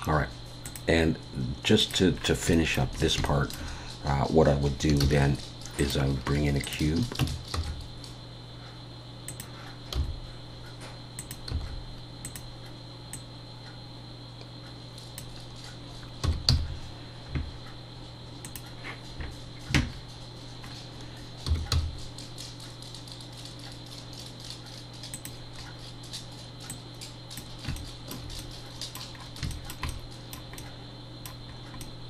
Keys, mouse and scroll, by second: 0.6 click, 2.2-2.5 scroll down 3, 2.5 shift+middle click, 2.9 scroll up 3, 3.2 shift+middle click, 5.0 shift+a, 7.2 Tab, 7.5 s, 10.0 g, 13.1 click, 16.2 s, 19.9-20.6 scroll down 1, 21.5-23.7 scroll down 2, 21.5 s, 25.6 scroll up 1, 26.7 click, 26.7-27.4 scroll up 2, 27.8 shift+middle click, 28.4 middle click, 29.2 scroll up 3, 29.5 shift+middle click, 29.9 middle click, 30.8 shift+middle click, 31.5 scroll up 2, 31.8 middle click.